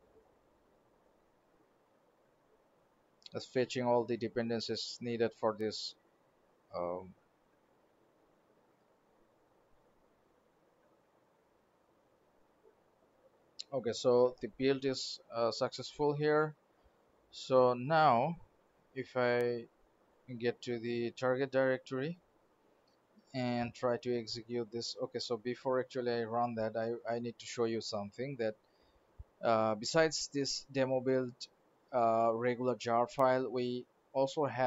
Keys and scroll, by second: 26.6 alt+Tab, 27.5 alt+Right.